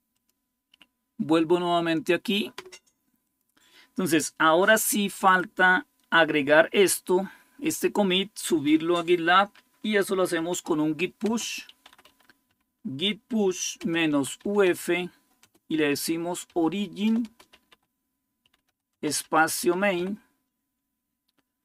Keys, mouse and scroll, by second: 0.0 click, 3.0 click, 5.1 click, 5.7-10.2 drag, 9.9-20.3 typing.